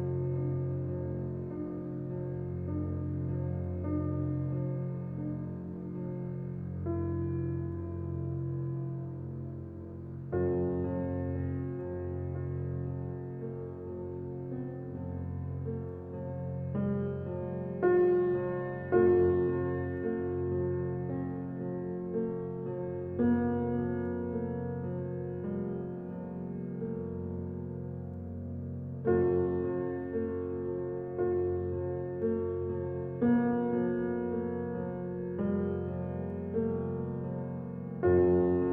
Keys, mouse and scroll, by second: 0.2-1.2 scroll up 1, 2.8 click, 3.6-4.4 scroll down 1, 4.4 click, 4.8-5.2 scroll down 1, 5.2-7.6 drag, 9.2 scroll up 1, 9.9 click, 13.1 scroll up 1, 13.7 scroll down 1, 14.2-14.6 scroll up 1, 15.0 click, 16.0-16.7 scroll down 1, 16.7 scroll down 1.